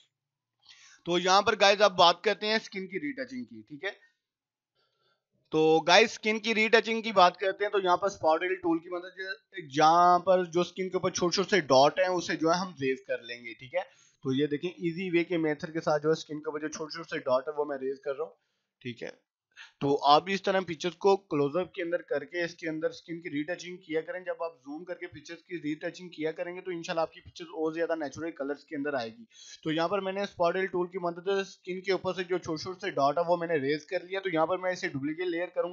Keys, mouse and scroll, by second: 4.8 F9, 6.0 click, 9.9 [, 10.4-11.1 click, 13.3 ], 13.6 click, 15.2 [, 15.7 click, 16.2 ], 16.7 click, 17.0 [, 17.2 click, 19.2 ], 19.9 [, 20.4 click, 21.1 scroll down 1, 22.4 click, 22.8 ], 23.1 click, 24.3 scroll up 1, 25.0 click, 25.9 [, 26.2 click, 26.5 ], 27.0 click, 29.6 right click, 29.8 click, 34.3-35.6 drag.